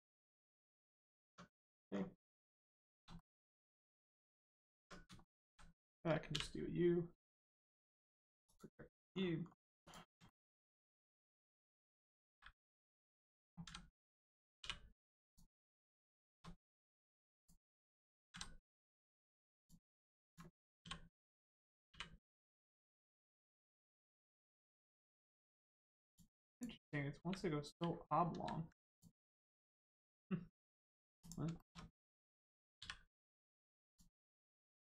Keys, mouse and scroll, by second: 1.0 scroll down 1, 1.2 Tab, 1.5 middle click, 1.9 scroll down 1, 2.1 middle click, 2.7 shift+middle click, 3.1 middle click, 3.2 middle click, 4.3 click, 4.7 Tab, 5.1 shift+middle click, 5.4 middle click, 8.4 click, 9.1 scroll up 1, 9.8 click, 10.2 shift+middle click, 10.6 middle click, 10.7 click, 11.0 Tab, 11.9 click, 12.3 s, 12.9 right click, 13.6 a, 14.5 u, 15.2 click, 15.5 scroll down 1, 16.2 shift+middle click, 17.3 click, 18.3 a, 19.5 click, 23.7 click, 26.0 click, 27.1 u, 28.3 ctrl+z, 28.9 click, 29.2-29.6 scroll down 1, 29.6 Tab, 29.9 click, 31.5 shift+middle click, 33.1 middle click, 33.8 click.